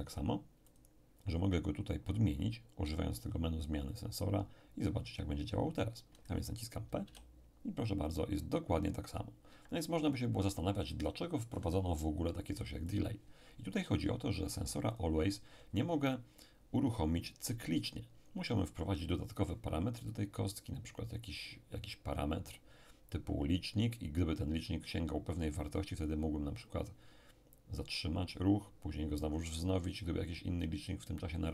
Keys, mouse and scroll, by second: 0.7 click, 3.9 click, 7.0 p, 9.5 Escape, 12.9 click, 14.9 click.